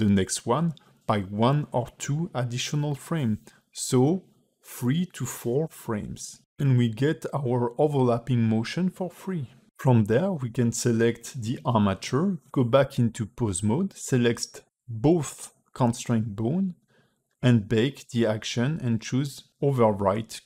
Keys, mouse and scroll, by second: 5.6 KP_3, 6.6 space, 7.8 click, 13.7 ctrl+Tab, 14.2 click, 14.7 shift+click, 15.2 q, 20.0 space.